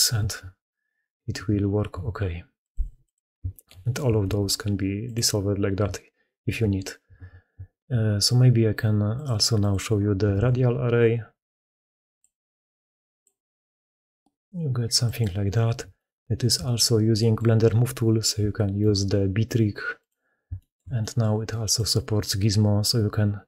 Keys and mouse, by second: 3.3 shift+middle drag, 3.6 middle click, 4.1 ctrl+x, 6.9 ctrl+z, 9.0 middle click, 9.5 middle click, 10.2 ctrl+x, 15.8-20.0 shift+middle drag, 20.4 shift+middle drag, 20.8 middle click, 21.6-22.7 middle drag.